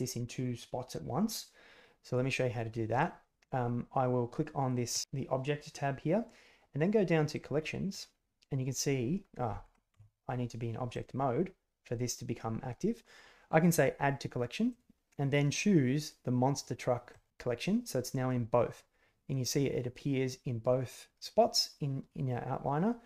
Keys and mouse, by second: 4.8 click, 7.3 drag, 9.8 Tab, 14.6-17.2 drag.